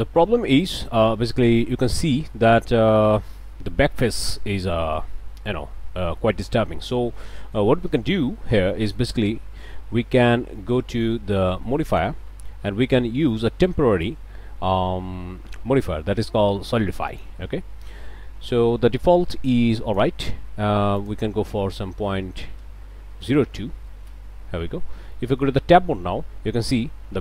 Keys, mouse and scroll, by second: 0.0 click, 1.5-3.0 drag, 3.3-6.8 drag, 8.4 scroll down 2, 8.7 click, 11.0 Tab, 11.9 click, 17.1 click, 19.5 click, 21.0 click, 21.9 Left, 22.3 Right, 23.3 BackSpace, 23.8 KP_2, 24.1 KP_Enter, 25.1 click, 25.2 middle click, 25.6 Tab, 26.0 scroll up 1.